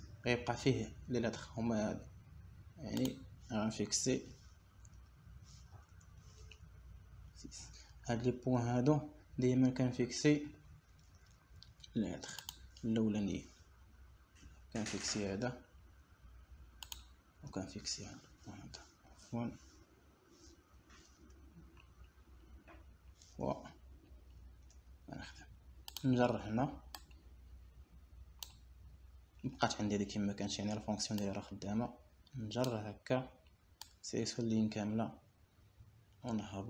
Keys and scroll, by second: 7.5 \, 8.5 BackSpace, 8.9 ;, 20.1 \, 21.7 BackSpace, 22.3 \, 23.4 BackSpace, 23.8 ;, 27.3 Return.